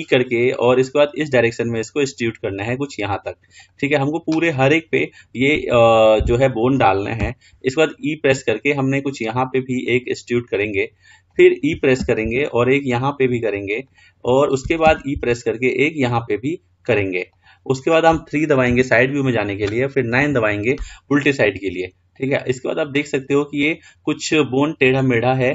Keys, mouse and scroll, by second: 13.9 e, 18.9 KP_3, 21.6-24.4 scroll down 3, 24.8-25.5 middle drag.